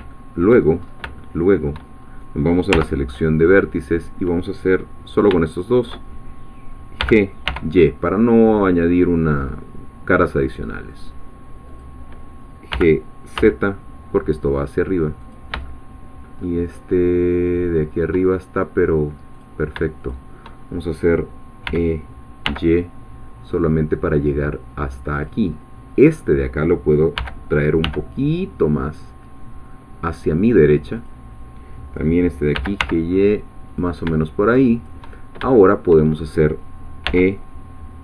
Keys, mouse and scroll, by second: 0.1 shift+middle click, 0.8 shift+scroll up 1, 1.2 shift+middle click, 2.0 shift+scroll up 1, 2.7 1, 5.1 shift+click, 5.6 shift+click, 7.0 g, 7.5 y, 10.9 click, 12.7 g, 13.4 z, 15.2 click, 15.6-18.2 shift+middle drag, 19.3 click, 20.1 shift+click, 21.6 e, 22.4 y, 25.1 click, 27.2 g, 27.8 y, 30.0 click, 31.1-32.5 drag, 32.5 g, 32.8 y, 33.7 click, 34.7 shift+click, 35.2 shift+scroll down 2, 35.5 shift+middle click, 37.1 e.